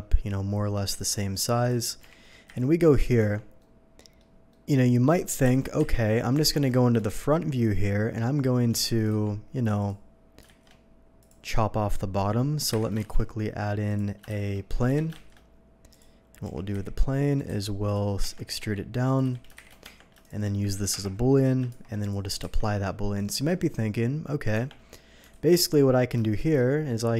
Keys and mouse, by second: 2.0 g, 2.5 y, 2.5 g, 3.2 Tab, 5.4 KP_1, 5.8 KP_3, 6.4 alt+a, 7.0 shift+click, 8.5-10.4 shift+drag, 8.7 Tab, 9.1 d, 9.3 Tab, 10.6 shift+a, 10.8-18.4 drag, 12.7 Delete, 13.1 Delete, 13.1 shift+s, 14.3 shift+s, 14.9 Escape, 15.1 shift+s, 15.3 shift+a, 16.4-19.5 typing, 18.2 Tab, 18.8 Tab, 19.8 Tab, 20.9 ctrl+KP_Subtract, 21.7 shift+2, 22.4 q, 22.6 ctrl+KP_Subtract, 22.8-27.1 ctrl+drag, 24.5 Tab, 25.3 alt+a.